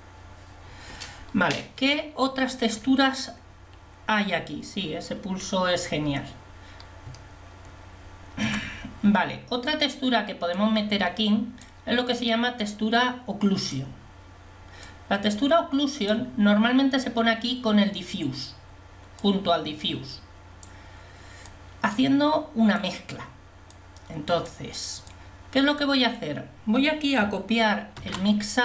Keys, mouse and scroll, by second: 23.8 click, 28.2 shift+d.